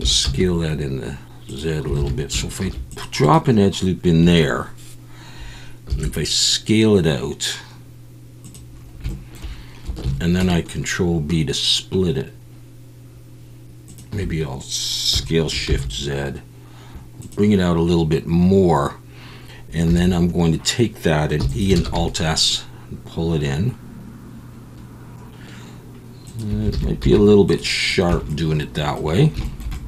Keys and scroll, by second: 0.0 s, 0.2 z, 2.0 alt+a, 2.1 s, 2.6 ctrl+r, 5.9 s, 10.0 ctrl+b, 15.1 s, 15.7 shift+z, 19.9 3, 21.4 e, 21.8 alt+s, 26.7 alt+a, 27.0 z, 28.1 Tab.